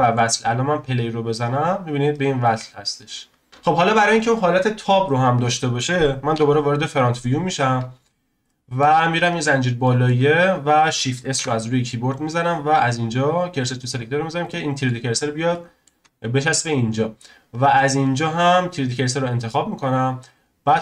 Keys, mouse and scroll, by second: 0.4 scroll down 2, 1.4 click, 2.4-3.1 scroll down 3, 3.1-3.5 scroll up 1, 3.5-6.3 drag, 6.3 KP_1, 6.8-7.4 scroll up 1, 7.4-8.4 scroll down 1, 8.4-9.3 shift+middle drag, 9.3 click, 9.8-11.3 shift+middle drag, 11.3 shift+s, 14.1-14.4 scroll up 3, 14.4-15.1 shift+middle drag, 15.1-15.5 scroll down 1, 15.5-17.5 shift+middle drag, 17.5-20.4 drag, 20.4-20.8 scroll down 2.